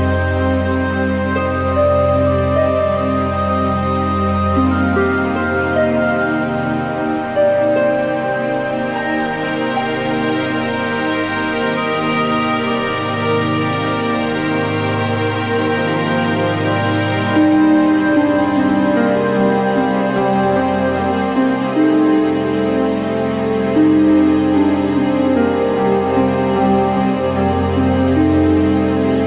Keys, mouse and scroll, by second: 0.5 scroll, 1.3 click, 3.2 click, 4.0 click, 4.8 click, 6.3 click, 7.2 click, 7.6-8.9 typing, 9.1 Return, 10.1 scroll, 10.5 middle click, 11.2 alt+middle click, 12.1 click, 13.2 click, 14.6 click, 15.4 alt+middle click, 15.4 alt+scroll, 16.4 click, 16.6 alt+middle click, 16.6 alt+scroll, 18.0 click, 18.9 click, 19.7 click, 21.1 click, 22.0 alt+middle click, 23.6 click, 24.3 click, 25.3 click, 26.8 alt+scroll, 28.0 click, 28.7 click.